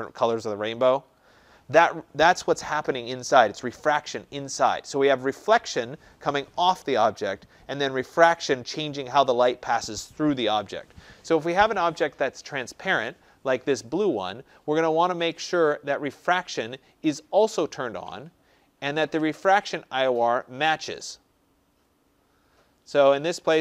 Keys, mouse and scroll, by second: 16.7 click, 17.7-18.6 scroll, 21.7-22.1 scroll.